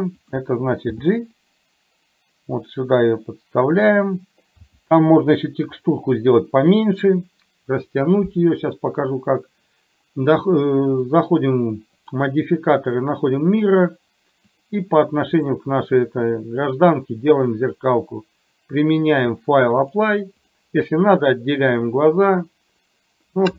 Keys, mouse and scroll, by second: 0.9 g, 4.7 r, 11.1 click, 11.9-13.6 drag, 14.4 click, 19.2 click, 20.4 click.